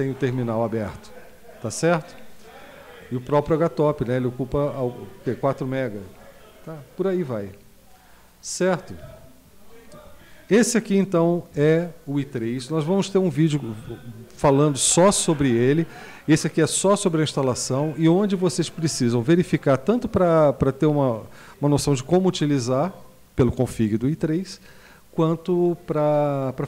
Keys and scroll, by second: 11.5 q.